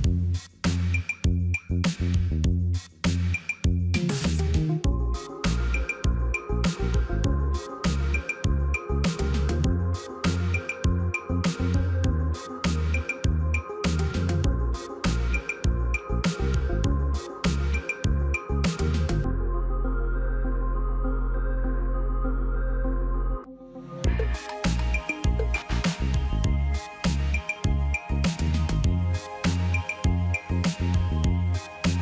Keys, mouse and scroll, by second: 0.0 double click, 0.6 ctrl+v, 2.1 ctrl+v, 2.1 ctrl+a, 3.4 ctrl+a, 3.6 ctrl+d, 4.5 double click, 5.2 double click, 5.5 ctrl+v, 7.0 ctrl+v, 7.1 ctrl+a, 8.7 ctrl+d, 9.7 double click, 12.6 double click, 13.1 ctrl+v, 14.9 ctrl+a, 17.2 ctrl+d, 18.2 double click, 19.7 ctrl+v, 20.7 ctrl+v, 21.0 ctrl+a, 22.5 ctrl+d, 22.7 ctrl+d, 23.1 ctrl+s, 27.8 ctrl+click.